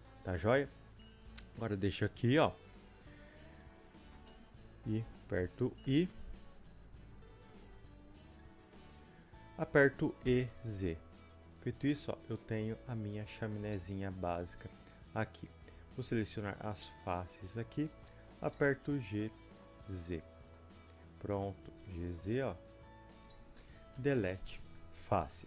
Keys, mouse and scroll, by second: 0.1 middle click, 0.9 click, 1.2 g, 4.1-11.5 shift+middle drag, 4.5-5.8 scroll up 2, 11.5 click, 11.6 scroll down 2, 11.9 scroll up 2, 11.9-13.8 middle drag, 12.5 Tab, 12.5-13.6 drag, 13.6 Tab, 13.8 scroll up 1, 14.1-15.5 middle drag, 15.5 click, 16.2 shift+click, 17.7-20.3 middle drag, 17.7 scroll down 1, 17.9 scroll up 1, 18.6 g, 20.3 click, 20.6-21.6 middle drag, 21.6 click, 21.6 g, 24.8 Delete, 25.4 scroll up 2.